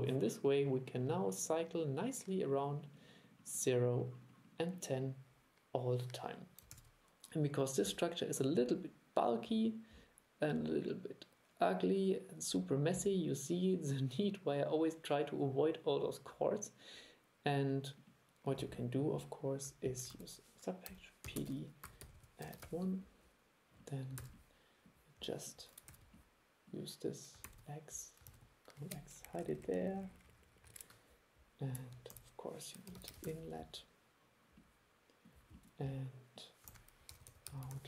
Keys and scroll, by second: 6.8 super+e, 20.2 super+1, 24.3 super+e, 26.0 super+e, 27.6 super+x, 28.4 super+v, 32.2 super+1, 36.8 super+1.